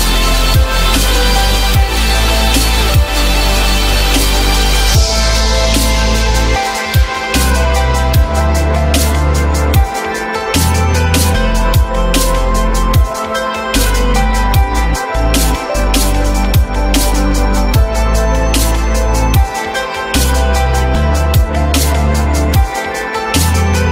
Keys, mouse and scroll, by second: 1.5 alt+middle click, 2.0 alt+middle click, 3.0 alt+middle click, 4.4 alt+middle click, 4.6 alt+middle click, 7.0-8.0 typing, 9.8 typing, 10.2 Return, 12.5 alt+middle click, 13.2 alt+middle click, 13.4-13.9 alt+scroll up 1, 17.4 ctrl+click, 18.9 ctrl+click, 19.3 ctrl+click, 20.6 ctrl+double click.